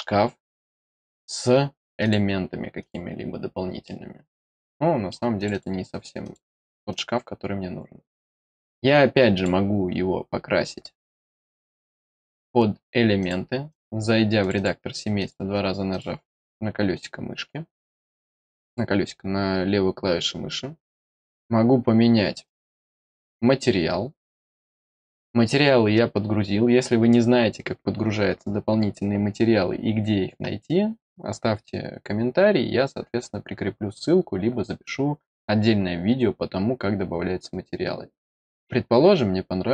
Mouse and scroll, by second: 1.9 click, 2.7 click, 3.8-5.0 middle drag, 5.3 click, 6.2 click, 6.8 click, 9.3 click, 10.9 click, 11.7 click, 13.1 click, 13.6 click, 14.3 click, 14.5 click, 15.1 click, 15.8 click, 19.0-19.7 scroll down 2, 20.0-21.2 scroll up 1, 21.2 click, 22.4 click, 31.5-32.9 scroll down 2, 32.9 middle click, 33.8 middle click, 34.2-35.5 middle drag, 35.6-37.6 middle drag, 38.1 middle click, 38.4 middle click, 38.7-39.1 scroll down 1, 39.5-39.7 scroll down 2.